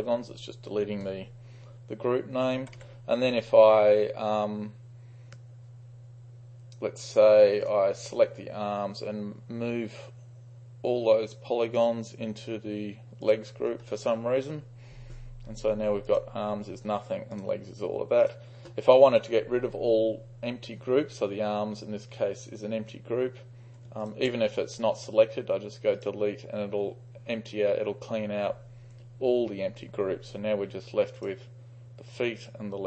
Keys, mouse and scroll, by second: 2.4-3.3 typing, 7.8-10.2 drag, 11.8 click, 16.2-19.8 drag, 24.1 ctrl+click, 26.0-26.6 drag, 31.2 click, 32.4-32.8 drag.